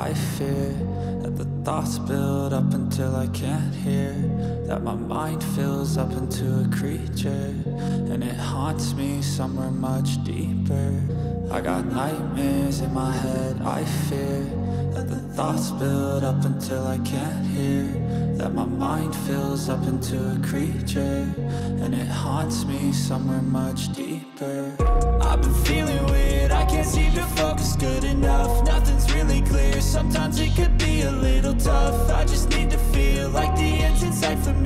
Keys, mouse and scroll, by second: 1.0 shift+middle click, 1.5 middle click, 3.4 right click, 3.7 3, 4.1 right click, 5.1 shift+right click, 5.6 middle click, 9.5 click, 11.0 middle click, 12.4-17.4 drag, 17.8 middle click, 19.2 right click, 20.1 shift+right click, 20.8 middle click, 21.9 shift+right click, 23.0 shift+right click, 23.5 middle click, 24.8-28.9 drag, 28.9 middle click, 29.7 click, 31.6 click, 32.7 click.